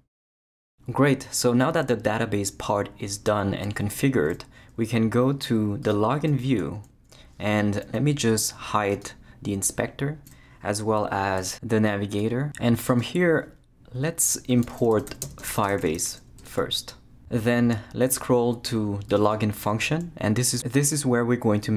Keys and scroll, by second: 11.4 super+0, 13.9 Return, 14.3-16.5 typing.